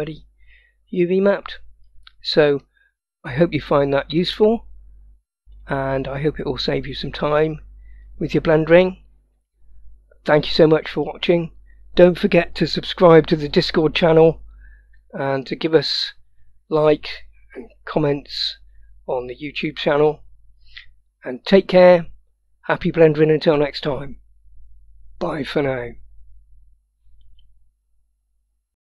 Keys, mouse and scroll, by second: 1.0-1.6 scroll down 1, 1.6-2.7 scroll up 1, 2.7 middle click, 4.3-5.6 drag, 6.9-8.2 drag, 8.8-9.6 scroll down 1, 9.6-11.0 middle drag.